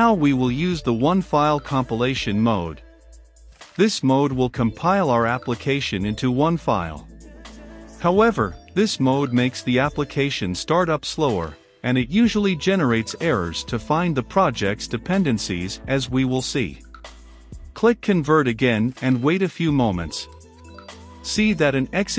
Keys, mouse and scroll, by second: 12.7-13.9 drag, 13.9-15.7 middle drag, 15.7-22.1 drag.